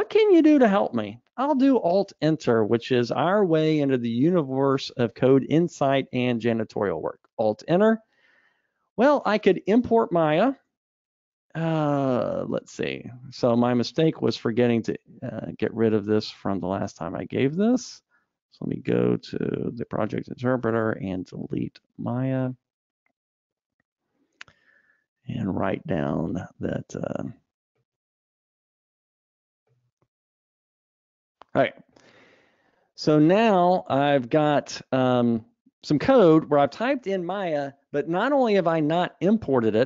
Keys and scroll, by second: 8.1 alt+Return, 13.1 Escape.